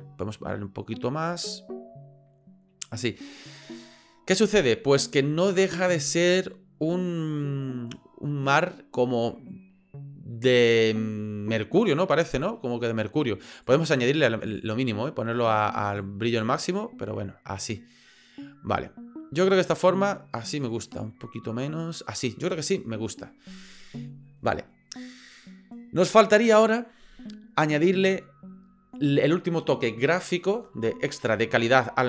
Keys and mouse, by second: 0.3-3.1 drag, 13.6-14.6 drag, 16.0-22.0 drag.